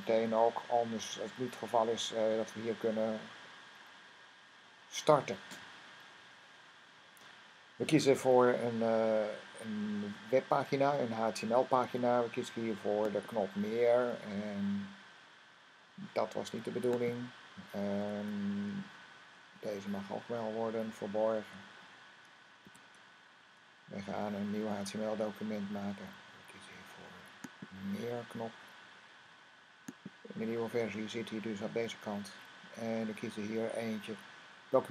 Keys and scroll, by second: 22.5 typing.